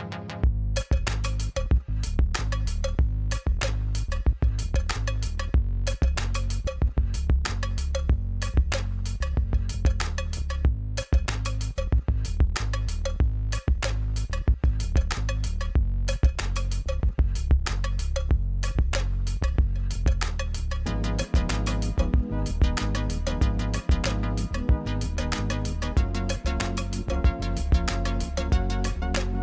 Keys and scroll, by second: 21.6 shift+d, 21.9 z, 25.7 shift+z, 26.8 g, 27.2 shift+z.